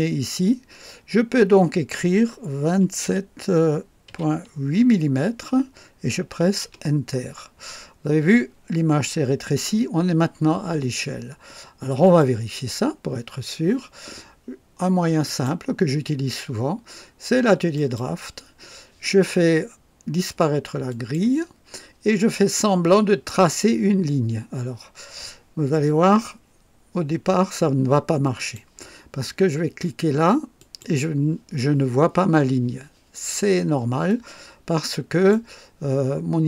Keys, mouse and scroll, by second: 2.7 KP_2, 3.0 KP_7, 4.1 KP_Decimal, 4.8 KP_8, 6.6 Return, 12.0 click, 12.7-13.0 scroll down 1, 15.2 click, 17.7 click, 20.9 click, 28.4 click, 30.6 click, 34.0-35.5 drag.